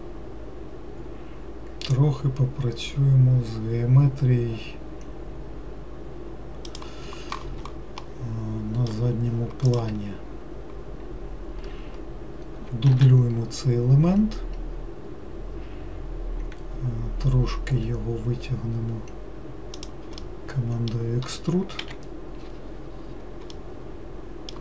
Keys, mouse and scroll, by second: 8.3-9.9 middle drag, 9.9 click, 13.2 shift+d, 20.5-22.1 middle drag, 22.1 KP_Decimal, 22.9-23.4 scroll down 6, 23.8-24.6 middle drag.